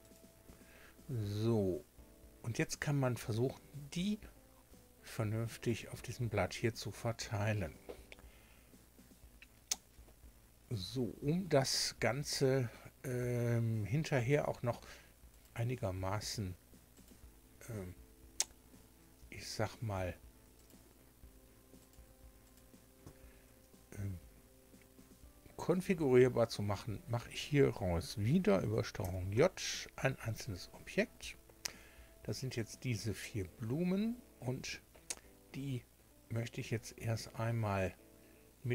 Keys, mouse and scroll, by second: 0.0 click, 0.7 scroll down 1, 1.3-1.7 scroll up 1, 5.0 shift+click, 13.1 a, 14.2 right click, 15.3 shift+right click, 16.2 shift+right click, 16.9 shift+right click, 20.6 shift+right click, 21.8 shift+right click, 22.4 shift+right click, 29.0 ctrl+j.